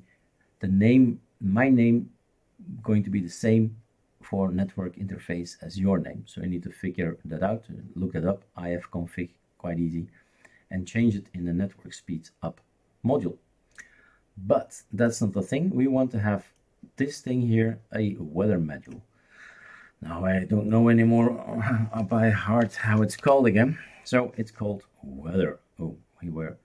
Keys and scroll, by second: 21.8-23.7 typing.